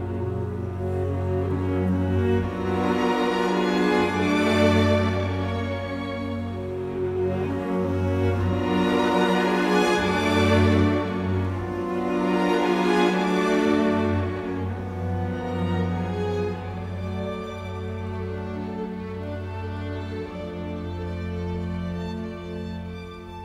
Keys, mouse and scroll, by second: 0.4 Delete, 10.4 t, 10.5 space, 15.5 ctrl+g, 16.0 Escape, 16.9 Delete, 17.7-18.5 typing, 18.7 Return.